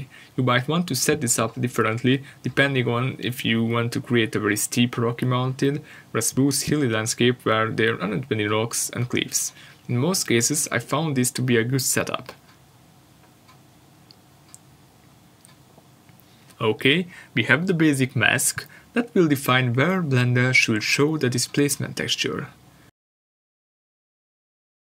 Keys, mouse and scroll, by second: 13.0 scroll up 1, 13.3 click, 18.1 BackSpace, 18.2 Return.